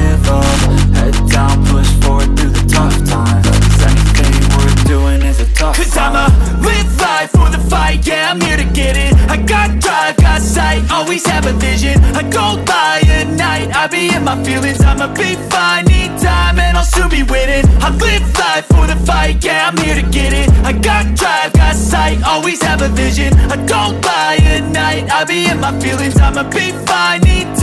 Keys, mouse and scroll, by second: 0.4 ctrl+z, 0.7 click, 6.4 click, 6.4 click, 7.8 shift+Tab, 10.0 Tab, 10.8 shift+Tab, 11.4 Tab, 15.4 Tab, 19.1 Tab, 19.2 click, 24.4 click.